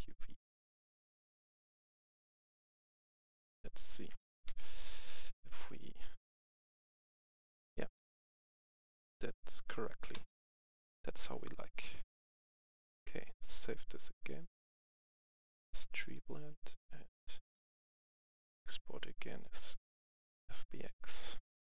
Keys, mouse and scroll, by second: 2.3-3.6 scroll up 1, 3.6-4.0 scroll down 1, 4.4 c, 5.0 right click, 5.2 a, 5.5 c, 5.7-9.8 drag, 11.2 right click, 11.5-12.1 scroll down 1, 12.8 click.